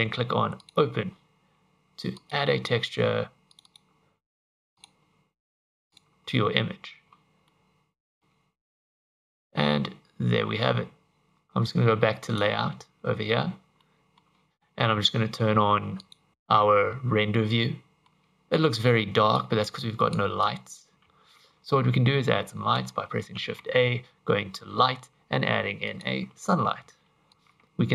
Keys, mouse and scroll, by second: 0.6 click, 7.5 middle click, 8.3-10.5 scroll up 1, 12.3 click, 13.8 middle click, 16.0 click, 16.3 click, 17.7 middle click, 19.4 click, 20.5 click, 20.9 scroll down 6, 21.1 ctrl+z, 23.4 shift+a, 26.8 g, 27.3 r.